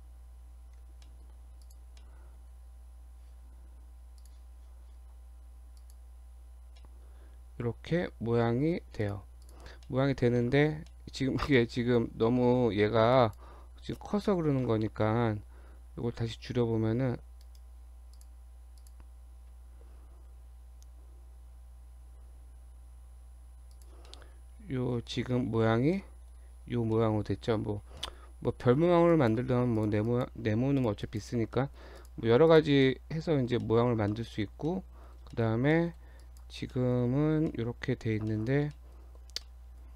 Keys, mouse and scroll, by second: 0.8 Tab, 1.1 middle click, 1.6 click, 2.0 middle click, 4.2 click, 6.8 scroll down 1, 6.8 middle click, 9.1 click, 9.5 click, 9.9 middle click, 10.9 middle click, 11.6 middle click, 13.2 click, 14.0 shift+middle click, 15.9 s, 18.2 click, 18.8 click, 20.2 s, 24.1 middle click, 24.3-25.0 scroll up 4, 25.1 shift+middle click, 25.4-26.0 scroll up 3, 26.0 middle click, 26.9 scroll down 2, 26.9 middle click, 27.5-28.0 scroll down 6, 28.0 middle click, 28.4 scroll up 2, 28.6 middle click, 29.1 click, 29.8 click, 30.1 click, 30.8 click, 31.1 click, 31.5 middle click, 32.0 click, 32.5 click, 32.9 middle click, 33.5 scroll up 1, 33.7 middle click, 33.9 scroll down 1, 34.1 middle click, 34.4 Tab, 34.7 middle click, 35.3 shift+middle click, 35.5 shift+scroll down 1, 35.7 middle click, 36.3 click, 36.8 shift+middle click, 37.0-37.6 shift+scroll down 3, 37.5 middle click, 38.3 shift+middle click, 38.7-39.3 scroll up 2, 38.8 middle click, 39.4 middle click, 39.9 scroll down 2.